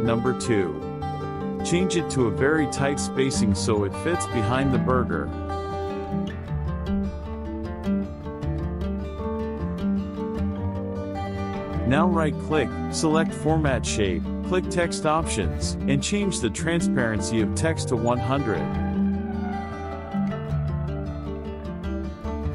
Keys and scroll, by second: 2.9 KP_Subtract, 12.0 KP_Add, 13.4 KP_Subtract, 21.3 KP_Subtract.